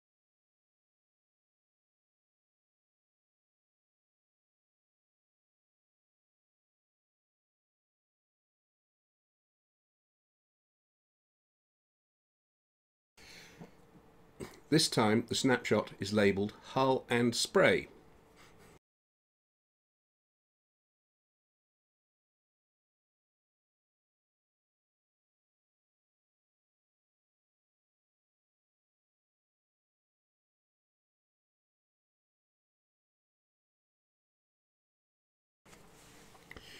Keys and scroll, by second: 1.4 ctrl+0, 15.6-18.5 typing.